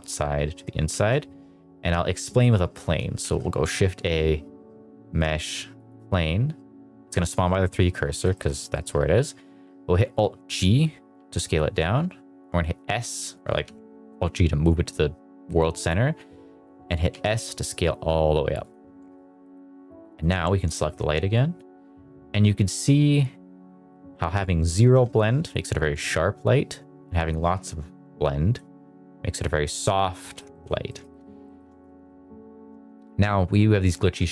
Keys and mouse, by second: 0.8 shift+a, 3.1 shift+a, 7.5 middle drag, 8.0 middle drag, 8.2 shift+middle drag, 8.5 middle click, 9.2 alt+g, 11.1 s, 13.5 Escape, 17.0 s, 18.5 click, 19.3 middle click, 20.0 click, 20.7 shift+middle drag, 21.4-28.5 drag, 30.1 middle drag, 30.4 shift+middle click, 30.8 shift+middle click, 31.0 shift+middle click, 31.3 middle drag, 31.6 shift+middle drag, 31.9 middle click, 32.7 shift+middle drag, 33.9 shift+middle drag.